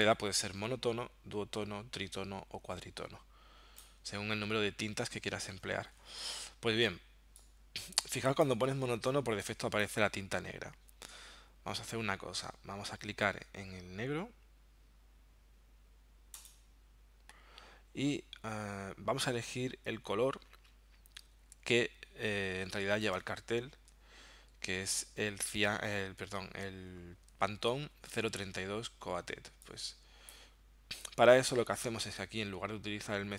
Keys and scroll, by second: 23.0 super+Tab, 28.1 super+Tab.